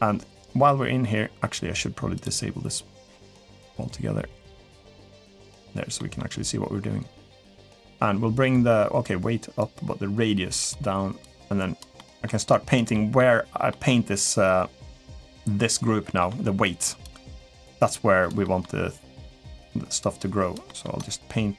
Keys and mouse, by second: 1.9 click, 5.0 click, 5.8 middle click, 7.7-8.8 drag, 9.4-10.5 drag, 11.0 click, 11.7 middle click, 12.4 click, 12.7 middle click, 13.5 middle click, 16.0 middle click, 16.5 click, 17.0 middle click, 17.7 click, 18.2 middle click, 19.0 middle click, 19.5 click, 20.4 middle click, 20.8 click.